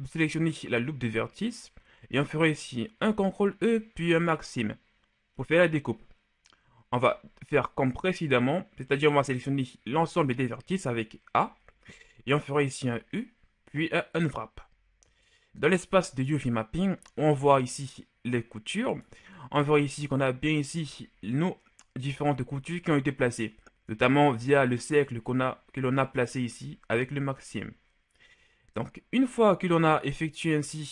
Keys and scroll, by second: 3.2 ctrl+e, 7.2 a, 10.2 a, 13.2 u, 16.2 Tab.